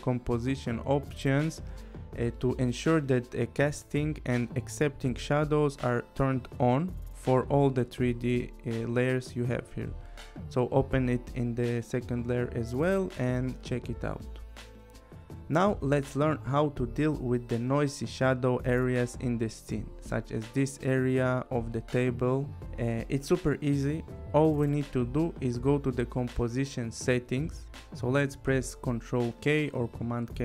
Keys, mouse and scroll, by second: 0.9 click, 2.6 click, 4.0 click, 6.9 click, 8.3 click, 10.1 click, 11.2 click, 13.6 click, 17.3 click, 19.5 click, 20.2 scroll, 20.5 click, 21.2 click, 23.6 click, 28.0 ctrl+k.